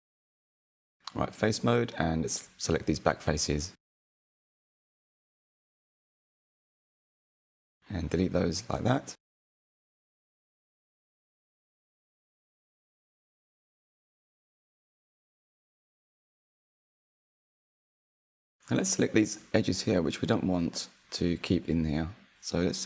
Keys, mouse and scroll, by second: 0.4 click, 1.9 shift+click, 2.5 shift+click, 3.1-5.2 middle drag, 5.2 Delete, 7.5-9.6 shift+middle drag, 9.6 Tab, 12.2 Tab, 12.7-13.9 middle drag, 13.9 click, 14.4-16.4 shift+middle drag, 16.4 click, 17.0-18.2 scroll up 1, 18.2 click, 18.8 shift+click, 18.9 shift+click, 19.0 shift+click, 19.2 shift+click, 19.3 shift+click, 19.5 shift+click, 19.7 shift+middle click, 20.5 middle click, 22.4 shift+click, 22.5 shift+click, 22.6 shift+click, 22.7 shift+click.